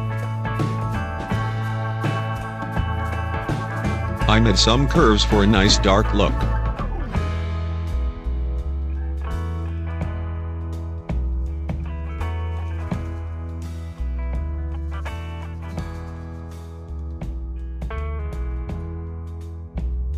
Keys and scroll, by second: 13.3 ctrl+0.